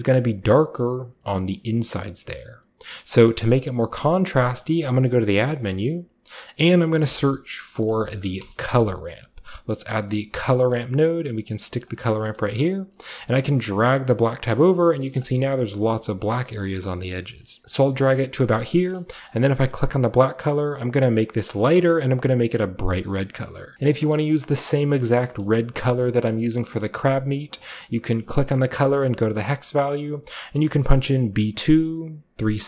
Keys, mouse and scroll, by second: 1.6-2.4 scroll down 2, 2.2-4.5 middle drag, 2.4-3.1 scroll up 2, 4.5 shift+click, 4.5 typing, 6.9-8.4 typing, 10.4 click, 10.4 typing, 11.5 click, 11.9 click, 12.2 middle click, 12.4-12.9 scroll up 1, 12.9-14.3 scroll up 1, 13.4-14.7 drag, 14.3-14.7 scroll up 1, 17.4 click, 17.6-18.0 scroll down 1, 18.0 click, 18.7-20.6 scroll down 2, 18.8 middle click, 18.9-23.7 drag, 23.7 ctrl+v, 23.7 c, 23.8-24.5 scroll up 1, 23.9 middle click, 24.5-26.1 scroll up 1, 24.7 middle drag, 25.2 middle click, 26.1-27.5 scroll up 1, 26.6 middle click, 27.5 scroll up 1, 27.5-29.6 drag.